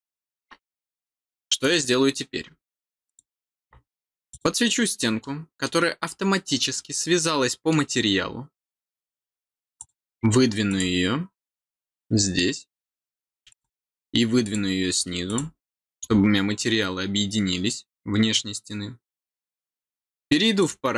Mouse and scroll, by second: 1.6 click, 3.0 click, 4.2 click, 5.1 middle click, 6.3 scroll up 1, 6.7 middle click, 9.7 click, 10.6 click, 11.9-12.3 middle drag, 13.4 click, 14.4 click, 15.2 click, 20.5 click.